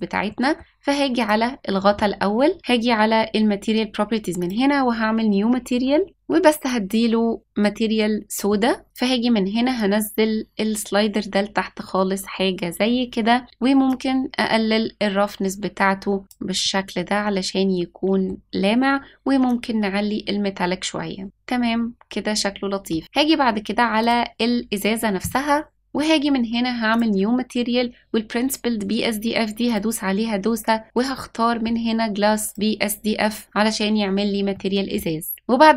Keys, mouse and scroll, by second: 0.0 scroll up 1, 0.2 middle click, 1.1 click, 2.6 click, 4.3 click, 8.8 click, 13.8-16.2 drag, 16.6-18.2 middle drag, 19.4-21.2 drag, 21.2-22.9 middle drag, 24.0 click, 26.9-32.6 drag, 34.5 middle click.